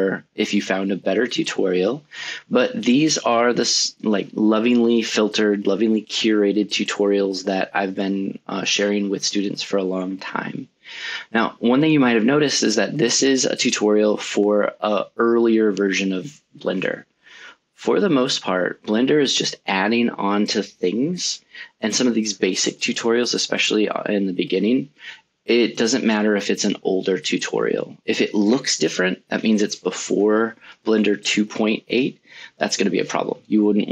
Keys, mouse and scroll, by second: 1.0 click, 2.4 click, 4.7 a, 6.5 alt+a, 10.3 click, 15.2 right click.